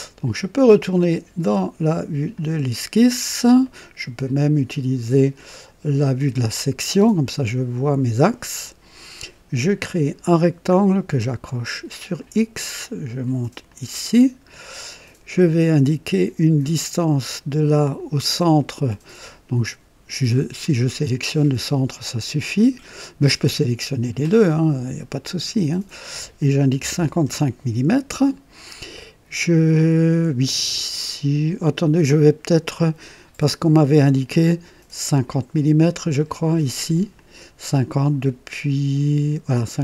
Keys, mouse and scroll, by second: 2.3 click, 3.2 scroll up 1, 3.6 right click, 6.1 click, 6.9 right click, 9.8 click, 12.1 click, 13.6 click, 14.5-14.8 scroll up 2, 14.9 right click, 16.5 click, 24.5 click, 25.7 click, 26.8 KP_5, 26.9 KP_5, 27.3 Return, 34.3 click, 35.5-36.2 right drag, 36.3 middle click, 37.1 click.